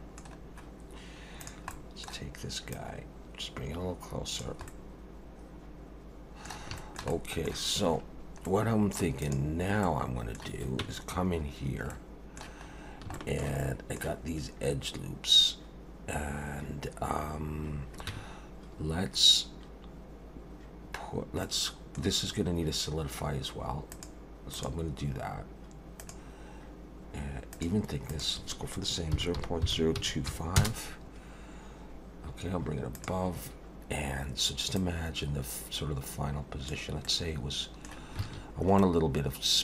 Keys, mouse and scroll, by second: 0.4-1.2 scroll down 1, 1.4 click, 1.8 middle click, 2.7 click, 4.7 middle click, 6.8 shift+middle click, 7.1 middle click, 8.4 middle click, 8.6 shift+middle click, 9.2 click, 9.8 middle click, 10.8 Tab, 11.9 middle click, 12.7 scroll up 2, 13.1 shift+middle click, 13.6 middle click, 18.1 Tab, 21.5 middle click, 23.9 click, 24.5 click, 27.5 click, 28.1 click, 32.9 click, 34.8 click, 37.0 middle click, 38.2 alt+a, 38.9 middle click.